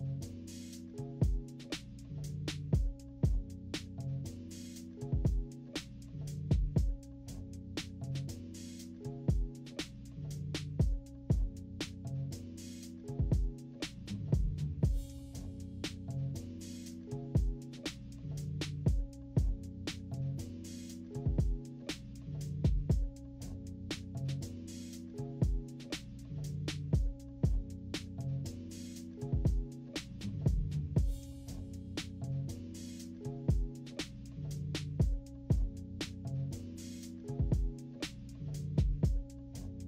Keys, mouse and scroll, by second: 0.3 -, 0.5 -, 0.7 =, 0.9 scroll down 1, 1.5-5.6 drag, 5.9 click, 6.6 -, 6.8 -, 7.1 =, 7.8 click, 8.8-10.2 drag, 10.6 ctrl+-, 11.0 ctrl+-, 11.2 ctrl+=, 11.5 ctrl+=, 12.3-15.9 drag, 15.9 scroll down 4, 16.2-19.0 drag, 19.4 -, 19.5 -, 19.8 scroll down 1, 19.8 =, 20.2 click, 21.0 -, 21.3-21.9 scroll up 3, 21.6 -, 21.9 =, 22.6-26.7 drag, 26.8 -, 27.1 =, 27.7-30.0 drag, 30.0-31.1 typing, 30.7-31.0 scroll down 1, 31.1 scroll up 1, 31.9-33.5 drag, 33.8-34.9 typing, 34.8 scroll down 1, 34.9-35.3 scroll up 1, 35.4-37.0 drag, 35.4-37.0 right drag, 37.3 -, 37.6-38.1 scroll up 3, 37.6 -, 37.8 =.